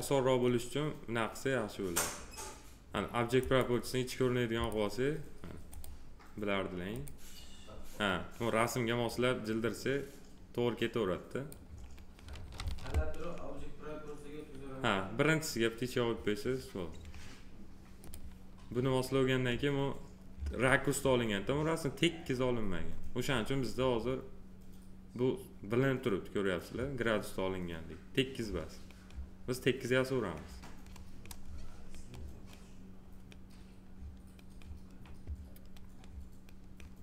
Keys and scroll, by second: 12.6 ctrl+z.